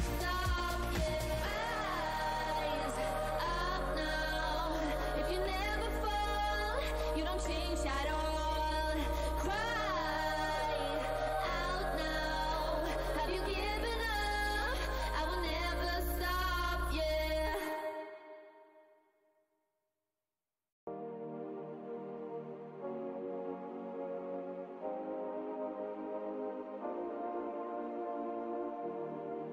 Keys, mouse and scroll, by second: 0.8 right click, 1.0 click, 1.2 w, 2.1 click, 5.0-5.5 alt+scroll up 1, 5.8 w, 7.9 alt+click, 8.8 alt+click, 9.4 click, 9.5 w, 10.2 right click, 11.0 alt+scroll up 1, 11.7-15.8 typing, 13.0 scroll, 14.1 alt+scroll down 1, 16.0 alt+click, 16.2-16.6 alt+scroll up 1, 17.2 alt+scroll, 19.2 r, 20.1 ctrl+click, 21.3 alt+scroll up 1, 21.6 z, 24.0 click, 25.6 alt+click, 25.9 alt+scroll down 1, 26.6 click, 27.1 alt+scroll, 27.5 alt+w, 27.5 scroll up 1.